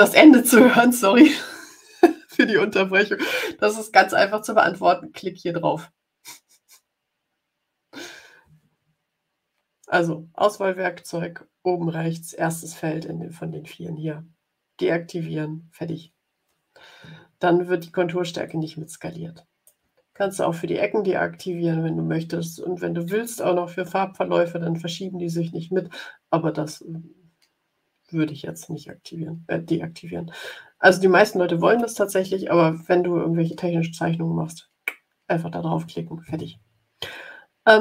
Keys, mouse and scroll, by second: 18.4-19.9 drag.